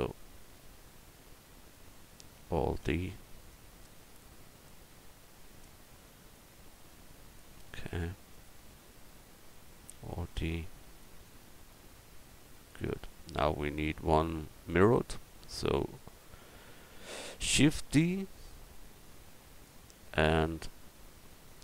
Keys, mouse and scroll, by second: 2.7 alt+d, 3.5-5.3 drag, 6.3-7.3 drag, 8.3-9.9 right drag, 9.9 alt+d, 10.7-12.6 drag, 13.8 middle click, 14.7-15.8 right drag, 15.8-17.4 drag, 17.4 shift+d, 19.0-20.8 drag, 20.1-21.6 middle drag, 20.1 right click.